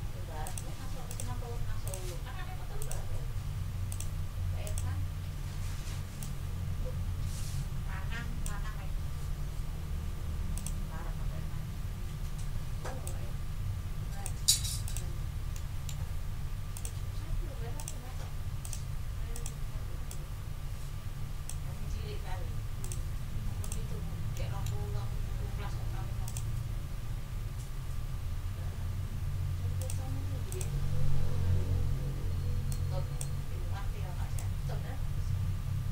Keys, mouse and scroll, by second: 0.4 click, 1.1 click, 1.8 click, 2.8 click, 3.9 click, 4.6 click, 5.4 ctrl+scroll up 2, 6.2-8.6 ctrl+drag, 8.6 ctrl+scroll down 2, 10.5 click, 13.0-14.4 drag, 14.8 click, 15.2 ctrl+scroll down 2, 15.5 ctrl+click, 15.7 ctrl+click, 16.1 ctrl+scroll up 2, 22.1 ctrl+scroll down 2, 22.8 ctrl+middle click, 23.6 click, 23.8 ctrl+middle click, 24.0 ctrl+scroll down 2, 24.3 ctrl+click, 24.5 ctrl+middle click, 26.2 ctrl+click, 27.1 ctrl+scroll up 2, 28.1 ctrl+scroll up 2, 28.7 ctrl+scroll down 2, 29.8 click, 30.5 click, 32.7 ctrl+click, 33.5 ctrl+scroll up 2, 34.3-35.9 middle drag.